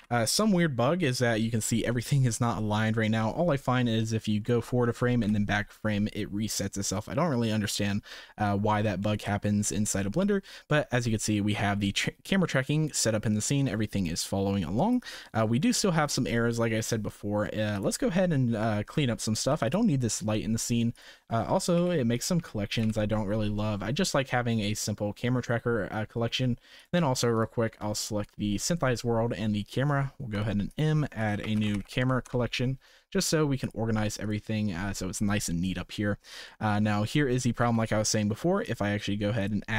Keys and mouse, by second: 0.0 KP_0, 4.4 Right, 5.2 Left, 9.0-9.7 shift+middle drag, 10.8 shift+middle drag, 12.3-14.9 drag, 15.9 shift+middle click, 19.4 x, 21.7 Delete, 22.1 click, 22.3 Delete, 22.7 click, 22.8 Delete, 26.7 click, 28.0 shift+click, 30.3 m, 32.2 Return, 33.6 click, 34.2 click, 36.5 shift+middle drag, 37.6 shift+a.